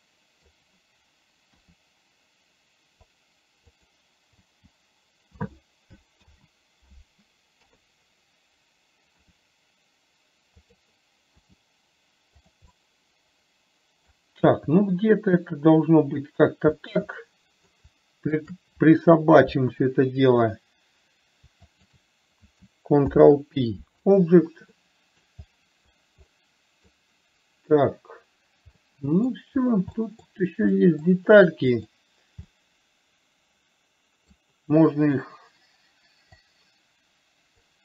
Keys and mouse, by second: 0.3 middle click, 1.9 r, 4.8 h, 6.5 ctrl+z, 8.0 KP_3, 9.7 r, 11.7 g, 13.2-14.5 middle drag, 14.8 g, 17.2 middle click, 18.8 shift+click, 22.0 shift+click, 23.4 ctrl+p, 25.2-25.5 middle drag, 26.7 middle click, 29.2-29.7 middle drag, 30.3 middle click, 31.2 middle click, 32.0 click, 32.8-34.7 middle drag, 36.7-37.8 drag.